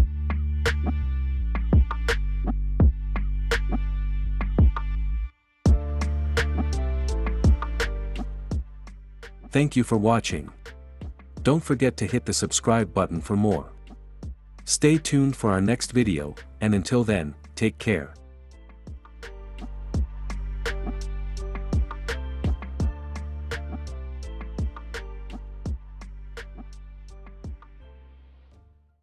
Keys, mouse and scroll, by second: 3.9 click, 5.9-6.9 drag, 7.4-8.4 drag, 8.6 click.